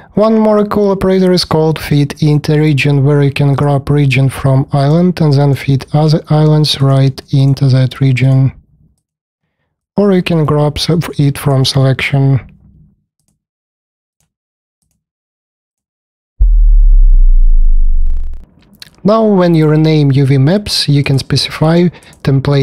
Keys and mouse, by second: 3.4 middle click, 4.7-5.4 middle drag, 7.4 middle click, 9.3 middle click, 13.2 middle click, 14.8 click, 21.0-22.6 drag.